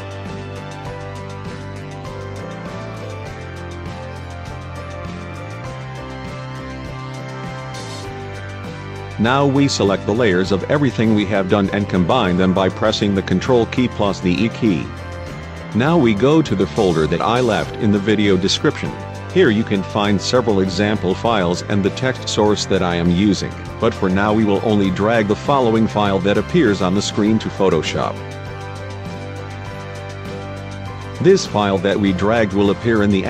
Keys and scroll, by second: 4.9 ctrl+e, 13.3 ctrl+e.